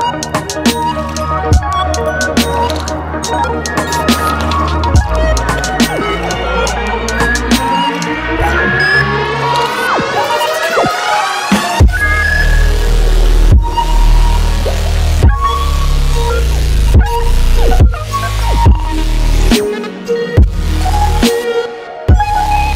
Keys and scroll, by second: 16.8 ctrl+d.